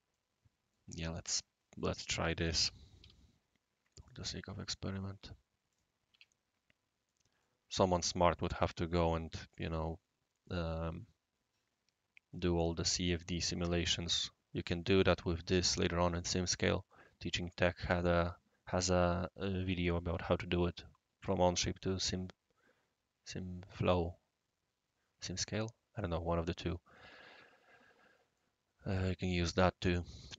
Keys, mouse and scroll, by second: 2.3-3.0 typing, 4.0 click, 5.7 click, 6.1 Escape, 6.3-7.1 scroll up 1, 28.3-29.5 middle drag.